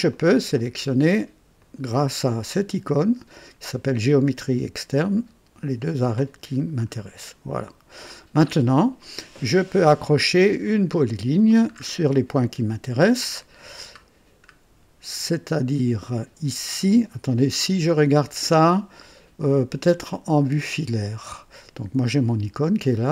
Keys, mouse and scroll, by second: 0.1 click, 1.6 click, 5.8 click, 6.9 scroll up 2, 7.6 right click, 10.6 click, 11.7-12.1 scroll up 2, 14.0-14.4 scroll down 2, 20.4 click.